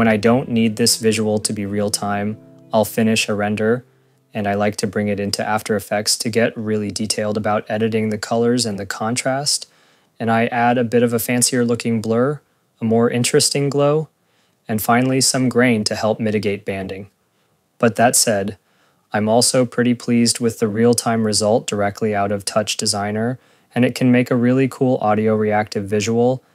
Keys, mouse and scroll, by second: 26.0 click, 26.1 click.